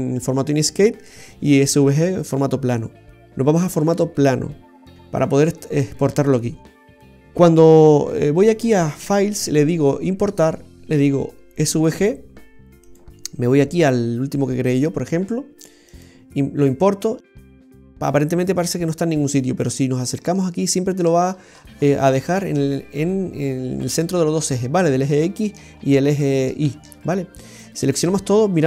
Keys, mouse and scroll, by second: 8.9 click, 12.8 click, 15.8 click, 19.7-20.2 scroll up 3, 20.3 shift+middle click, 21.2-22.1 scroll up 6, 22.1 shift+middle click, 24.6-25.1 scroll up 3, 25.1 shift+middle click, 25.6-26.6 scroll up 3, 26.6 shift+middle click, 26.9-27.4 scroll up 2, 27.5 click, 28.2-28.6 scroll up 10.